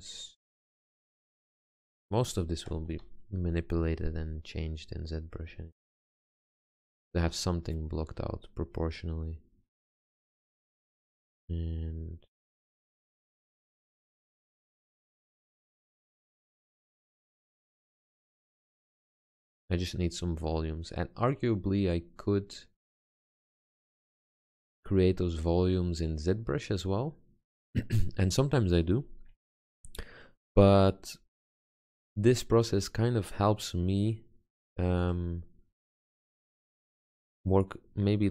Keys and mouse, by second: 1.2 click, 3.1 g, 7.2 Tab, 12.8 click, 13.6 click, 20.2-21.4 drag, 21.8 click, 23.0 middle click, 26.4 middle click, 27.8-29.3 middle drag, 34.4 click, 35.4-37.1 drag.